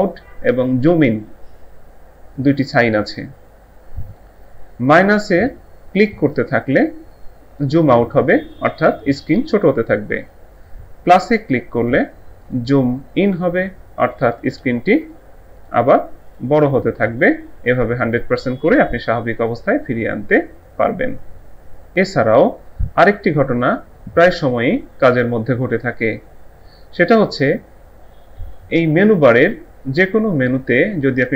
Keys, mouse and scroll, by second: 6.0 click, 6.3 double click, 8.5 click, 11.8 double click, 12.4 click.